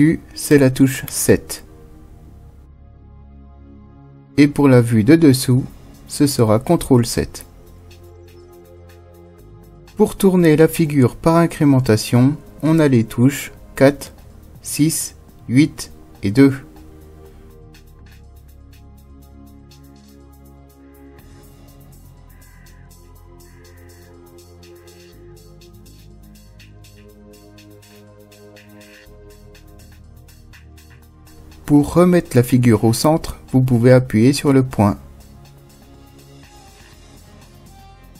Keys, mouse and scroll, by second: 5.7 ctrl+KP_7, 11.5 KP_4, 16.6 KP_6, 22.4 KP_8, 25.9 KP_2, 33.0 KP_Decimal.